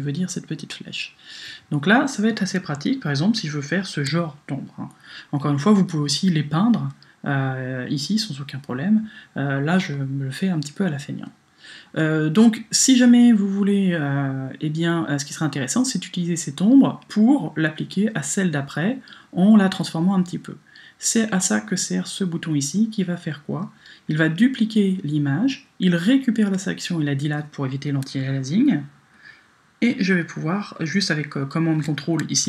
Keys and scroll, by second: 3.7 super+d.